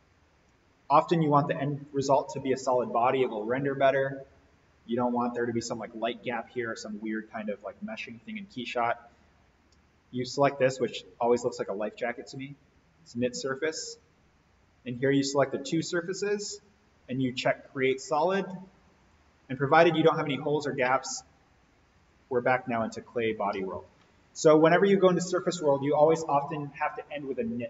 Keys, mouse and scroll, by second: 9.3-10.6 scroll up 1, 13.4 click.